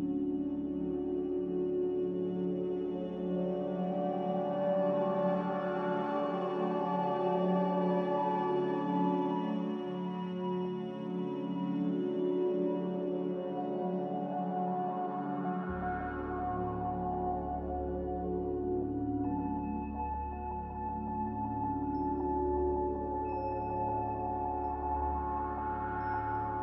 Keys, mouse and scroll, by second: 1.9 a, 20.6 z.